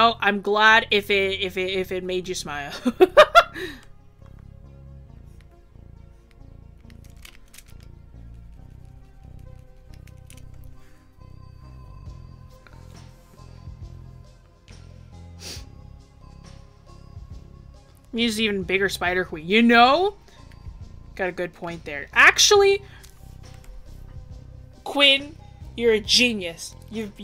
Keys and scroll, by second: 23.6 ctrl+-.